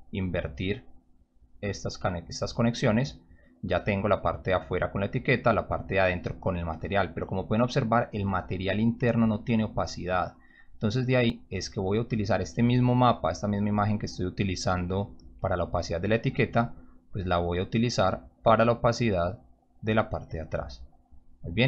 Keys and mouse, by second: 1.1-2.3 drag, 10.8-11.8 drag, 14.7 click, 17.4-17.7 drag, 18.3-19.7 drag, 21.2 click.